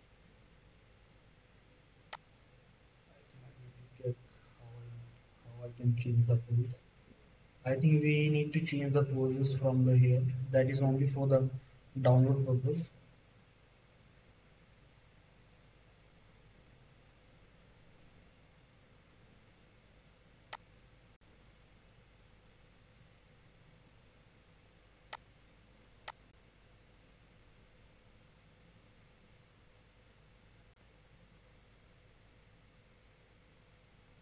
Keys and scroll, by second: 31.9 space.